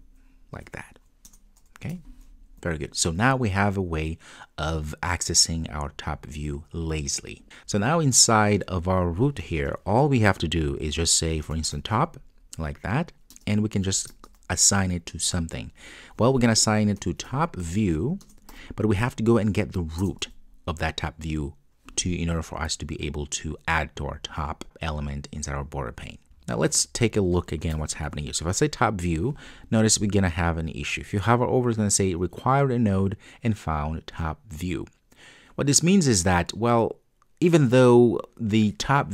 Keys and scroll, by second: 1.3 Return, 18.3 Return.